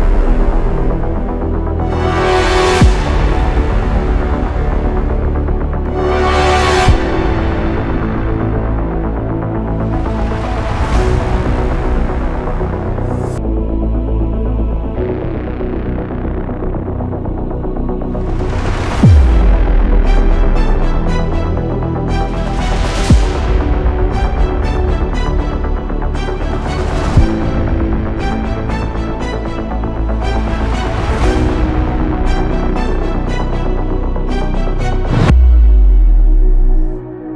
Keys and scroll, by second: 3.3-3.7 space, 18.9 space, 19.1 space, 36.2 ctrl+alt+space, 36.4 ctrl+alt+space.